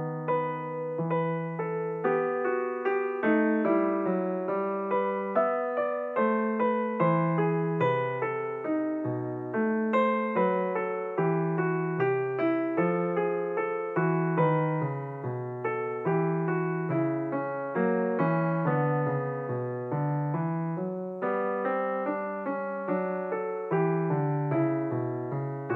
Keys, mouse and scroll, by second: 2.5-3.9 scroll up 6, 5.5-10.5 drag, 12.9-15.0 drag, 15.0-18.5 scroll up 7, 19.7-21.7 drag, 21.7-24.4 scroll down 8.